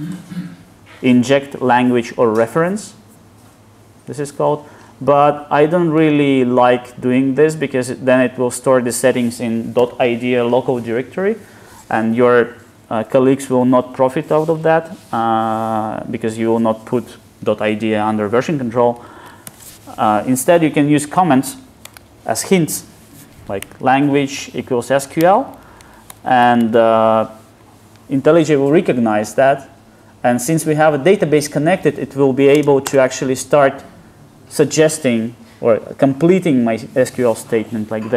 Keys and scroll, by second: 32.9 ctrl+space.